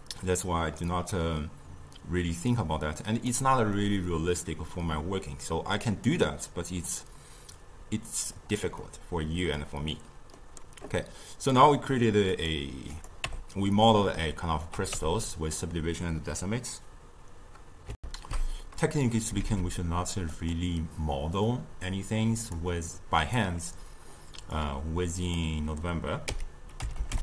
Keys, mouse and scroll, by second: 0.0 click, 1.0-3.9 drag, 3.9-6.7 middle drag, 6.7-8.9 drag, 8.9-13.3 middle drag, 13.3 Tab, 15.0 Tab, 18.0 ctrl+alt+shift+q, 19.4 shift+a, 22.4-25.3 drag, 26.3 s.